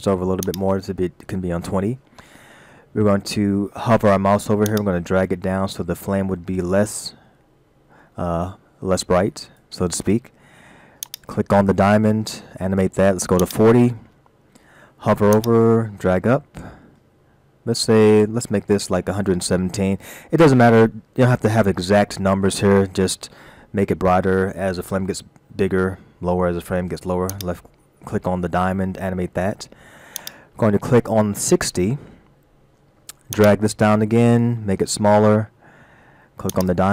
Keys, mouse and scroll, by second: 0.5 click, 4.7 click, 11.0 click, 13.4 click, 15.3 click, 27.3 click, 30.2 click, 33.3 click.